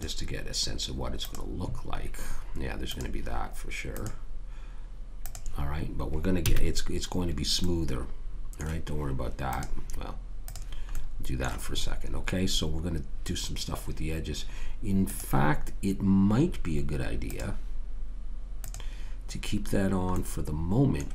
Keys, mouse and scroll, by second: 6.5 a, 7.6 middle click, 9.5 click, 11.8-13.6 middle drag, 15.1 click, 20.2 middle click, 20.5 middle click.